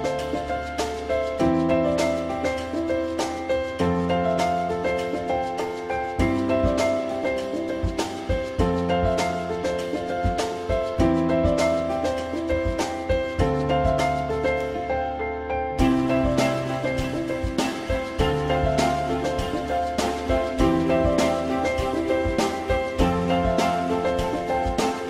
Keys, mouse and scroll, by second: 3.3 click, 3.5 F4, 5.0 z, 10.7 alt+middle click, 15.5 alt+middle click, 17.7 F4, 18.1 alt+middle click, 21.3 alt+middle click.